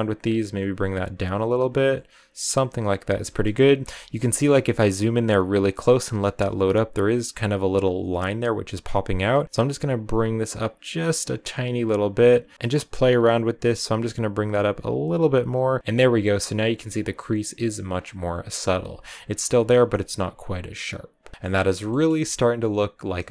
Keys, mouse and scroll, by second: 3.1 shift+middle click, 3.3-3.8 scroll up 6, 4.1-9.4 shift+middle drag, 9.4-10.5 scroll up 1, 10.8-15.8 drag, 15.8-16.3 scroll down 6, 16.3-17.4 scroll up 3, 17.9 scroll down 5, 21.3 shift+middle click, 21.5 scroll down 2, 21.7 shift+middle click, 22.0 scroll up 1, 23.1 shift+middle click.